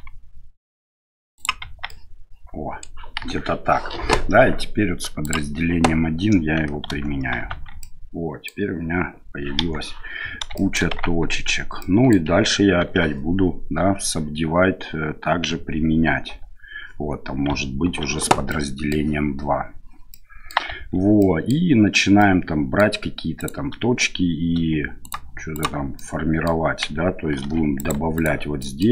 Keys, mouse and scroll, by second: 1.6 Tab, 1.9 middle click, 3.2 KP_1, 5.2 click, 6.9 ctrl+a, 7.5 Tab, 7.8 middle click, 9.6 KP_1, 10.5 shift+middle click, 11.0 Tab, 11.8 middle click, 12.8 ctrl+2, 16.3 ctrl+3, 17.8 ctrl+2, 18.5-18.9 middle drag, 20.1 middle click, 20.7 Tab, 21.2 middle click, 22.2 middle click, 23.4 right click, 25.0 shift+right click, 25.5 shift+right click, 26.0 middle click, 27.4 ctrl+r, 28.7 click.